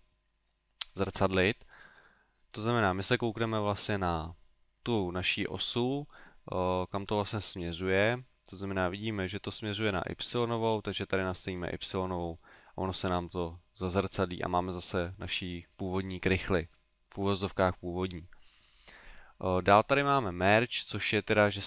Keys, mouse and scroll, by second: 1.7 middle click, 2.0 middle click, 6.6 middle click, 7.7 middle click, 9.8 middle click, 11.5 click, 14.0 middle click, 16.4 middle click, 20.4 click, 21.2 click.